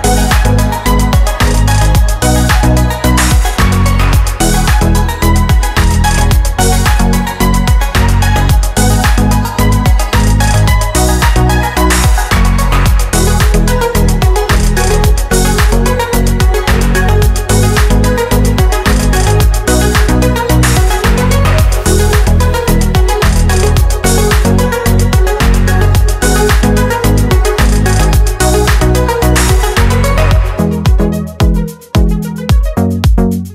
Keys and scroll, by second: 13.4 super+c, 13.7 super+v, 33.1 super+c, 33.3 super+v, 33.4 super+v.